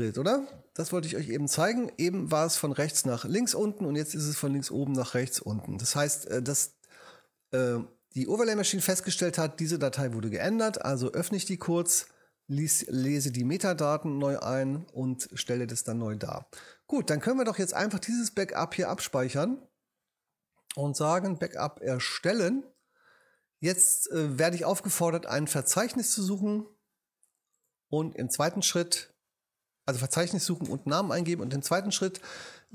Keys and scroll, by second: 30.7 Right.